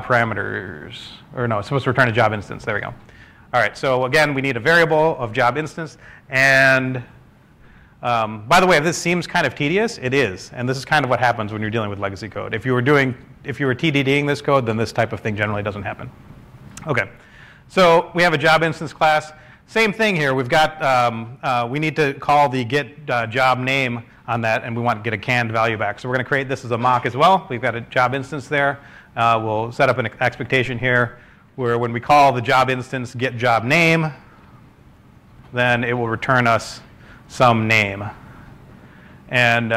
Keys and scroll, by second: 5.5 Escape, 8.6 ↻, 22.5-23.9 typing.